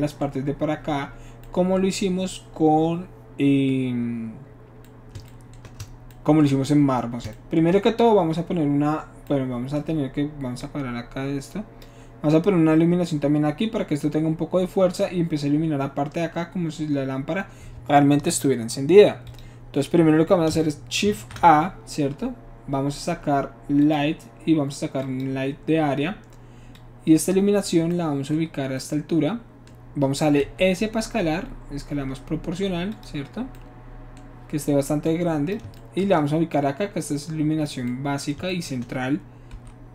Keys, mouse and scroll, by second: 10.6-11.8 drag, 19.3 click, 21.1 shift+a, 23.8 click, 25.0 click, 25.8 middle click, 26.8-27.7 drag, 30.7 s, 32.9 click, 35.0 click, 36.5-37.7 shift+drag, 39.5 s.